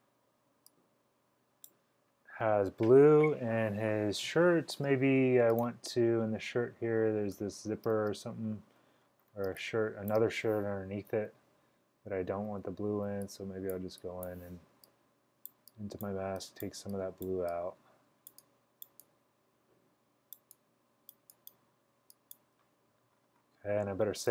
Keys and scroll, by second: 11.2 l, 13.0 typing.